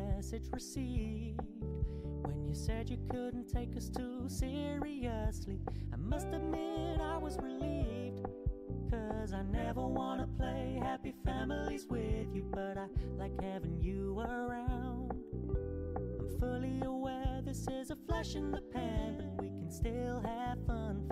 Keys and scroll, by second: 1.5 ctrl+g, 13.1 ctrl+d.